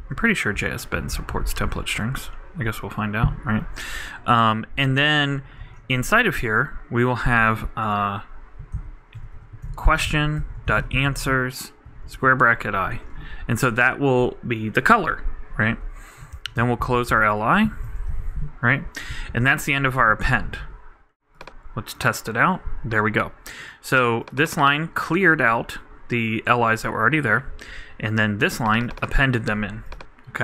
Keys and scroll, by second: 0.0 super+Right, 0.5 super+Delete, 5.2-6.1 typing, 16.3 shift+,, 16.6 shift+/, 17.0 shift+|, 17.1 shift+., 17.6 shift+super+., 17.7 shift+super+Right, 18.1 super+;, 19.1 super+;, 19.3 super+Left.